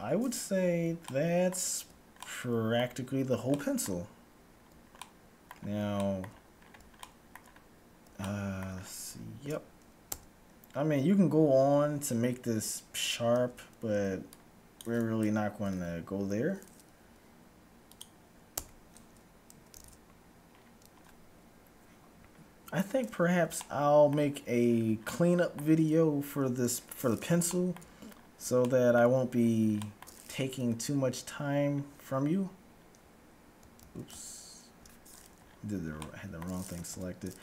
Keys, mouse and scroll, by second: 10.0 Tab, 10.0-10.7 scroll up 1, 10.7-11.0 scroll up 1, 11.0-11.7 scroll down 1, 13.2 z, 13.8 c, 15.7 g, 18.7 Tab, 19.7 a, 20.0 z, 20.3-22.8 scroll up 1, 22.8 scroll up 1, 23.3-26.8 middle drag, 26.8-27.7 scroll up 1, 27.7-31.3 middle drag, 30.7 Tab, 31.7-32.2 scroll up 1, 32.8-33.2 scroll down 1, 33.2 middle click, 33.7-34.7 scroll up 1, 33.8 ctrl+z, 34.0 ctrl+z, 35.0-36.2 scroll up 1, 36.2-37.4 middle drag, 37.0 a.